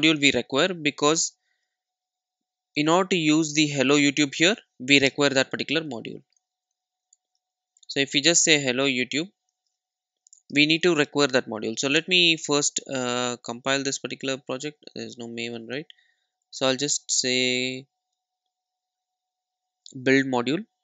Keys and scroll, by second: 1.5 super+s.